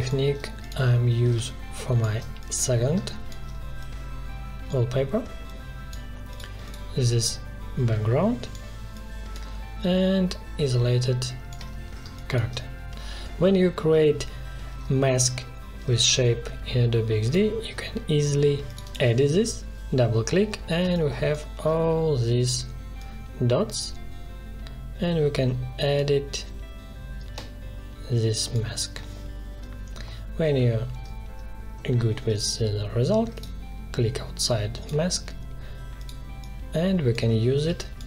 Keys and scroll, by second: 12.0 space, 20.8 space, 37.6 space.